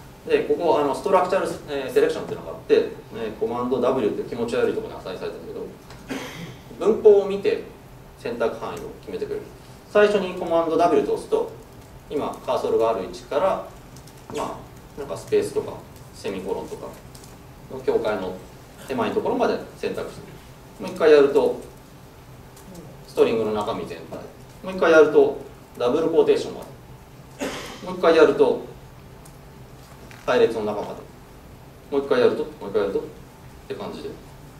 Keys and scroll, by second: 3.9 super+w, 10.9 super+w, 29.3 super+w.